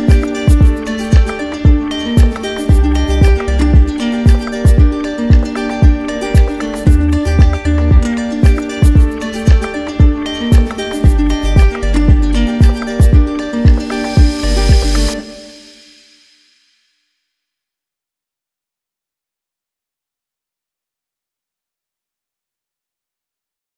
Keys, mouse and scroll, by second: 1.1 click, 3.2 click, 7.1 click, 7.5 alt+click, 9.1 click, 10.0 shift+click, 12.7 alt+click, 16.9-17.9 drag, 18.9-20.0 drag, 22.1 right click, 22.8-23.7 drag.